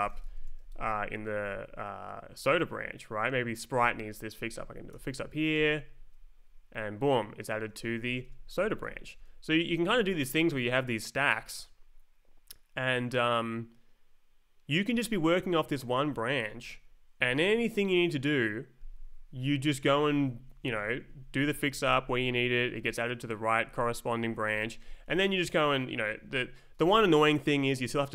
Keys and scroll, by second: 0.0-0.9 typing, 1.3 Left, 2.3 space, 2.6 Right, 4.9 shift+f, 5.5 Return, 6.4 Up, 7.7 Left, 8.1 Down, 8.2 Return, 8.8 Escape, 9.1 Right, 9.2 Down, 10.7 Up, 14.9 Left, 15.3 Up, 16.5 Right, 19.8 Down, 21.0 Up, 21.6 Down, 22.6 Up, 24.4 Up, 24.6 Left, 25.0 Down, 26.1 Down, 26.3 Up.